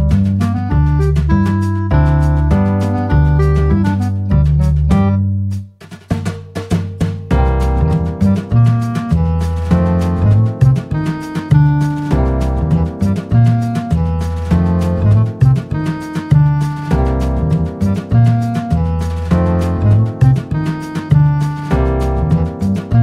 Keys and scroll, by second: 1.3 Return, 2.5 Return.